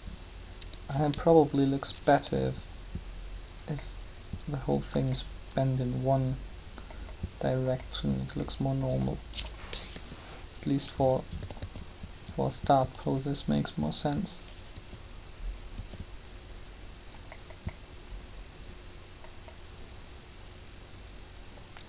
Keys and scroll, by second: 2.1 shift+r, 9.9 7, 11.6 typing, 14.7 r.